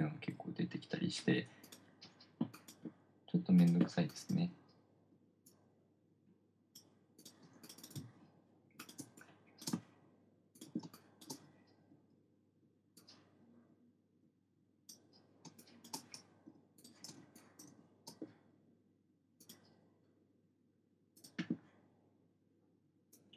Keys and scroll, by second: 0.1 BackSpace, 0.3 BackSpace, 0.7 BackSpace, 7.9 space, 11.3 space, 15.9 space, 17.5 space.